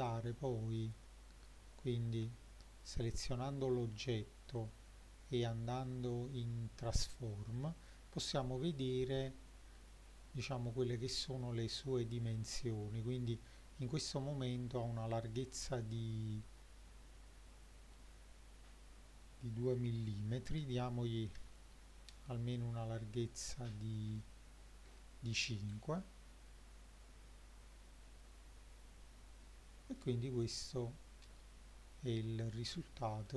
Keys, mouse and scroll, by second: 0.1 click, 0.9 click, 2.3 Tab, 2.9 click, 4.6 click, 15.2-21.4 drag, 22.5-23.1 scroll down 3, 23.4 click, 24.2-30.0 shift+middle drag, 30.4 click, 32.4 click, 32.8-33.3 shift+middle drag.